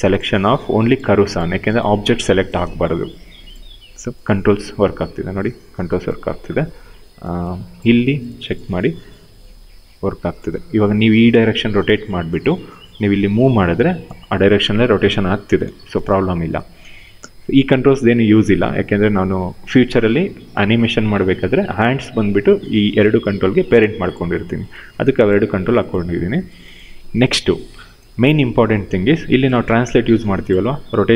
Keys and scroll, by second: 4.6 ctrl+z, 10.2 ctrl+z, 12.2 w, 15.3 ctrl+z.